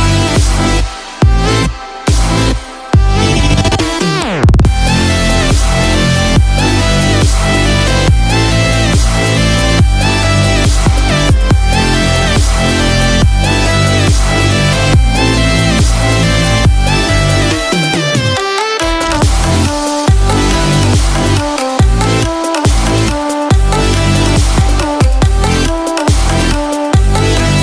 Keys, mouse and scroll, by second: 6.8 click, 7.5 click, 7.5 n, 10.0 Tab, 10.5 click, 12.1 Tab, 14.7 ctrl+r, 19.1 alt+click, 22.4 g.